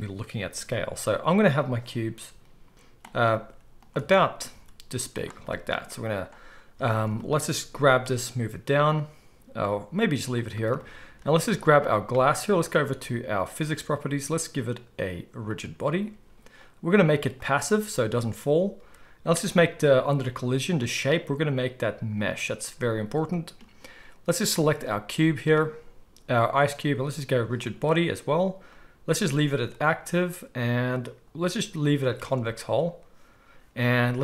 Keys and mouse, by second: 2.9 click, 3.3 s, 3.9 Tab, 4.4 s, 5.3-11.6 shift+middle drag, 6.7 Tab, 7.8 g, 11.6 click, 11.7-15.5 middle drag, 15.5-24.5 drag, 24.5-27.6 middle drag, 27.6-34.2 drag.